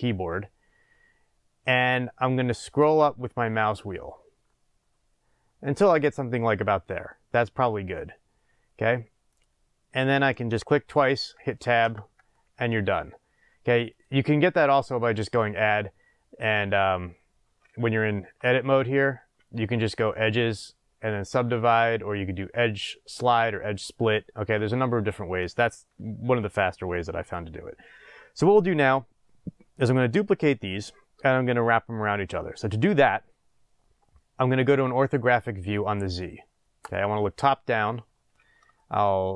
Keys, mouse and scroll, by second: 10.6 click, 11.8 Tab, 13.9 click, 14.8 click, 15.2-18.0 drag, 18.2 Tab, 20.0-25.6 drag, 24.5 Tab, 26.4-36.8 middle drag, 27.7-28.6 scroll down 2, 28.6-31.9 scroll down 1, 36.8 click, 38.0 scroll up 1, 38.7-39.3 shift+middle drag.